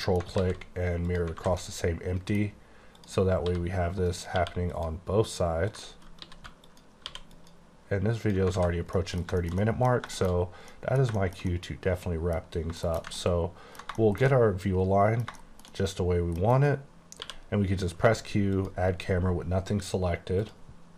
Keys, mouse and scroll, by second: 0.0 middle click, 0.5 alt+x, 1.2 click, 1.4 alt+a, 1.7 middle click, 2.5 scroll up 2, 3.1 click, 3.5 s, 4.2 right click, 4.4 q, 4.8 click, 5.8 click, 6.3 s, 6.7 click, 7.1 q, 7.4 click, 8.3 click, 8.6 alt+a, 8.8 scroll down 3, 9.0 middle click, 9.7 double middle click, 10.3 middle click, 10.5 scroll down 1, 10.8 middle click, 11.2 middle click, 11.5 middle click, 12.8 middle click, 12.9 KP_1, 13.3 ctrl+middle click, 14.1 shift+middle click, 15.5 shift+middle click, 15.8 double middle click, 16.5 scroll down 2, 16.8-17.3 scroll up 1, 17.3 q, 18.6 click, 20.5 click.